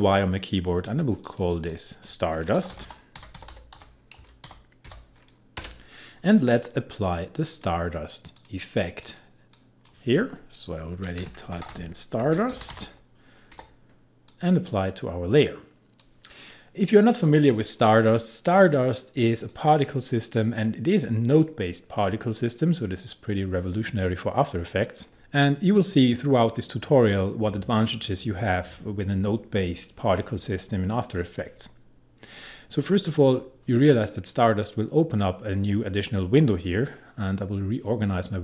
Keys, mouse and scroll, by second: 1.2 click, 2.3-4.4 typing, 5.6 Return, 7.5-11.2 drag, 11.2-13.5 typing, 14.3-19.5 drag, 19.5-36.8 drag, 36.8-38.4 drag.